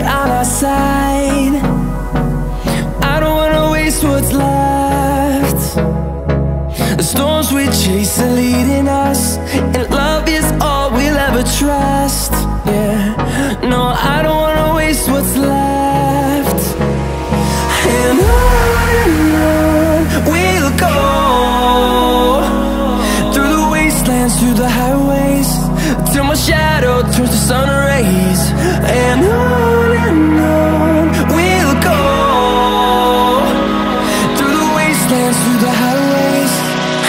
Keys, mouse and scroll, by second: 0.0 Tab, 0.6 middle click, 1.4 g, 2.2 click, 2.6 middle click, 3.1 shift+middle click, 3.6 right click, 4.2 click, 5.2 click, 5.7 4, 5.9 Return, 8.1 middle click, 8.8 shift+middle click, 9.3 middle click, 9.8 shift+middle click, 10.2 shift+middle click, 13.2 click, 13.4 shift+click, 13.6 shift+click, 13.9 shift+click, 14.1 shift+click, 14.4 shift+click, 14.6 shift+click, 14.8 shift+click, 16.2 ctrl+1, 16.7 shift+click, 17.0 shift+click, 17.2 shift+click, 17.4 shift+click, 17.6 shift+click, 18.8 shift+click, 19.1 shift+click, 19.3 shift+click, 19.5 shift+click, 20.0 ctrl+3, 20.9 shift+click, 21.2 shift+click, 21.4 shift+click, 22.4 7, 23.0 shift+click, 23.5 ctrl+7, 24.0 shift+click, 24.6 shift+click, 25.5 middle click, 26.9 1, 27.3 middle click, 28.2 middle click, 31.0 click, 31.3 middle click, 32.0 middle click, 35.4 F8.